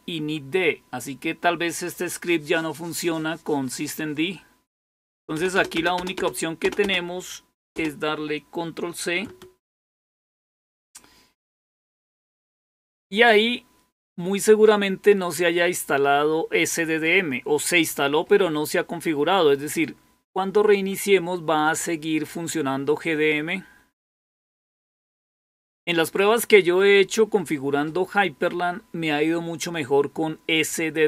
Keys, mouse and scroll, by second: 5.1 Return, 5.2 Return, 5.4-7.6 Return, 9.7 ctrl+c.